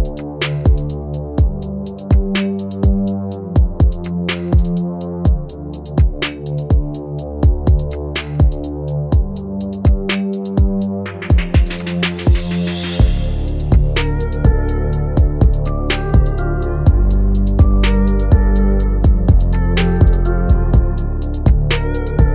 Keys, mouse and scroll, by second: 0.2 click, 1.0 click, 2.3 click, 3.0 KP_0, 3.1 KP_0, 3.9 click, 5.7 right click, 6.0-7.1 scroll up 5, 6.3 right click, 8.2-9.6 scroll down 5, 8.4 right click, 9.7 click, 13.0 click, 14.3 click, 18.1 right click, 18.5-19.1 scroll up 1, 19.1 click, 19.4 click, 20.3 right click, 20.5 space.